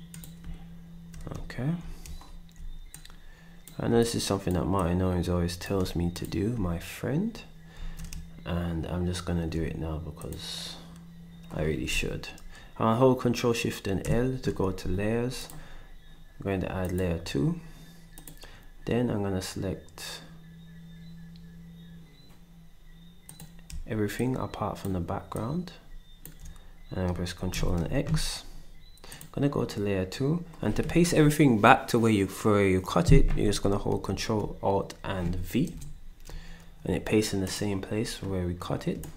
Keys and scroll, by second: 7.7 ctrl+s, 14.0 ctrl+shift+l, 27.5 ctrl+x, 35.7 ctrl+alt+v.